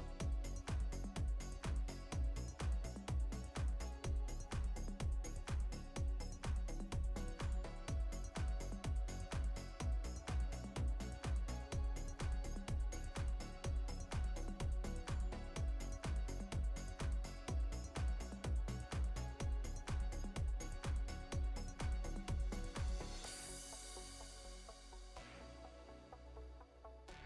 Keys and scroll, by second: 0.7 space, 20.0 space, 26.1 space.